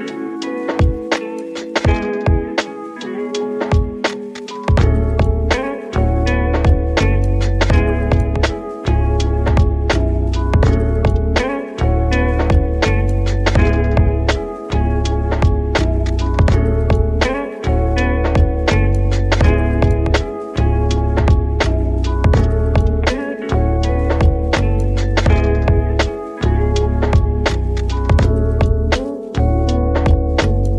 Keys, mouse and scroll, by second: 0.8 r, 4.1 KP_1, 5.9-6.6 scroll up 2, 6.6 Tab, 7.5 s, 10.8 right click, 12.4-13.3 shift+middle drag, 13.3 g, 16.7-19.0 middle drag, 19.4 click, 20.0 click, 21.9 shift+d, 23.2 KP_7, 25.1 g, 27.8 s, 30.2-30.7 middle drag.